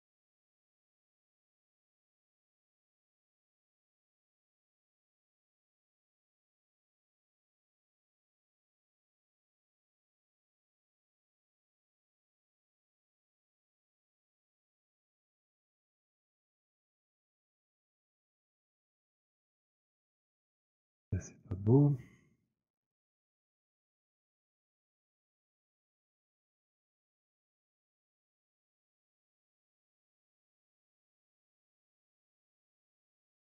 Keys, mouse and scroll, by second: 1.5 alt+click, 2.5 alt+middle click, 4.3 alt+click, 4.8 w, 5.1 click, 6.8 alt+click, 13.7 click, 15.7 alt+click, 16.4 alt+right click, 18.4 alt+click, 18.4 alt+right click, 18.9 click, 21.3 click, 25.8 click, 27.8 click, 29.5 click, 30.9 click.